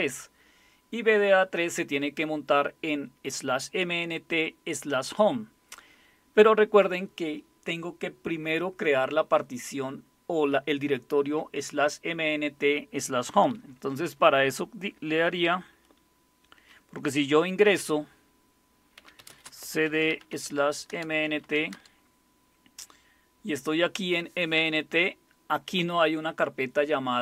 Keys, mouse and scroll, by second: 18.7-21.9 typing, 20.9 Return.